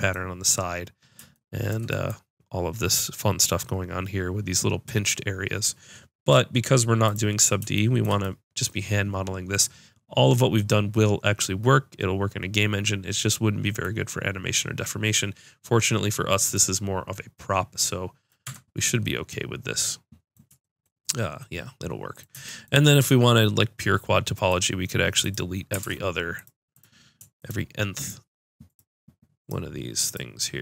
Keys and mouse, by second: 7.1-9.3 drag, 18.4 Tab, 25.2-29.1 drag, 25.8 ctrl+Tab.